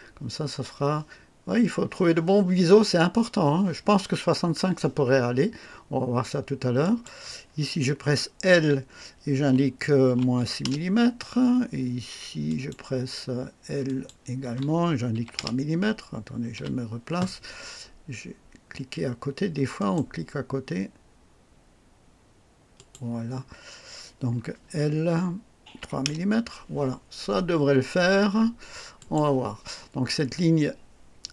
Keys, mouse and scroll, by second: 6.8 click, 8.5 l, 10.1 KP_Subtract, 10.4 KP_6, 10.8 Return, 12.5 click, 13.9 click, 14.4 l, 15.1 KP_3, 15.4 KP_Enter, 16.5 KP_1, 19.8 right click, 22.8 click, 24.6 l, 25.8 KP_3, 26.3 KP_Enter, 29.0 click.